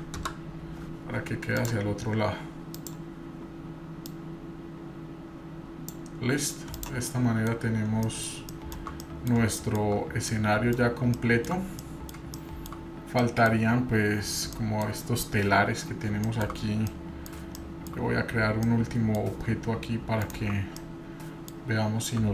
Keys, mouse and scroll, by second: 1.6 click, 2.0 scroll down 2, 2.2-2.7 scroll up 1, 2.7 click, 2.7 scroll up 1, 4.1 click, 6.3 scroll down 1, 6.7 click, 7.1-7.5 middle drag, 7.5-8.1 scroll down 3, 8.0 middle click, 8.5-8.9 shift+middle drag, 9.0 middle click, 9.7 shift+middle click, 10.3 middle click, 11.8 middle click, 12.2 shift+scroll down 1, 12.4-12.8 shift+middle drag, 13.2 middle click, 14.5-14.9 middle drag, 16.3 shift+middle click, 16.9-17.3 middle drag, 17.6-17.9 shift+middle drag, 18.7-19.1 middle drag, 20.2 shift+right click, 20.8-21.5 middle drag, 21.7-22.1 scroll up 1.